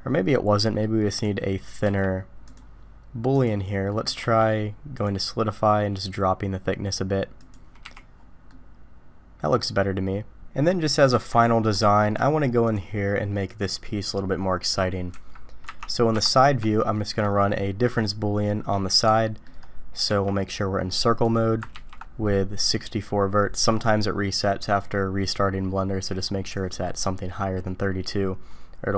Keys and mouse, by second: 1.1 click, 1.8 q, 3.9 middle click, 4.2 q, 7.8 h, 8.5-11.1 middle drag, 11.8 shift+middle drag, 12.6 click, 15.1 KP_1, 16.9 shift+middle drag, 19.1 shift+drag, 20.1 d, 21.7 ctrl+d.